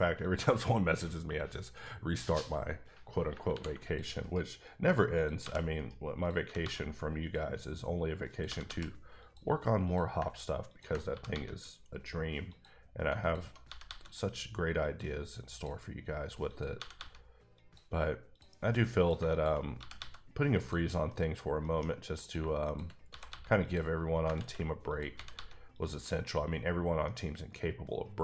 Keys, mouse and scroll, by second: 0.2 click, 2.6-2.9 scroll down 1, 3.5 r, 3.8 click, 4.2 right click, 5.1 click, 5.4 g, 5.7 right click, 6.2 click, 6.4 g, 6.6 g, 7.2 click, 8.3 click, 8.4 g, 8.6 g, 9.2 click, 9.8 click, 10.7 ctrl+click, 11.1 g, 11.3 g, 12.5 click, 13.6 g, 13.8 g, 14.8 click, 15.5 click, 16.7 g, 16.9 g, 17.5 click, 18.3 click, 19.3 shift+click, 19.8 g, 19.9 g, 20.5 click, 21.1 middle click, 21.6 middle click, 22.2 click, 22.3 shift+click, 23.0 click, 23.1 g, 23.2 g, 23.6 click, 24.3 ctrl+z, 24.9 click, 25.1 g, 25.3 g, 25.7 click, 27.0 middle click.